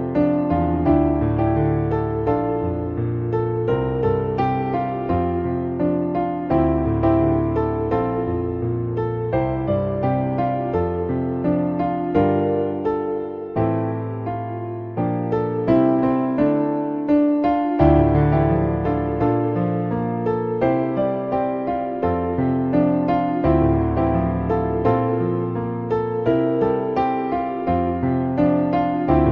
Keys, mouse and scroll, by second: 0.4-1.4 middle drag, 2.4 click, 4.1-6.5 drag, 8.6-12.0 drag, 11.4 BackSpace, 13.0-15.0 drag, 15.5-15.8 middle drag, 16.4 middle click, 17.7-19.9 drag, 20.3 middle click, 22.2-24.4 drag, 25.0-25.6 middle drag, 28.9-29.3 drag.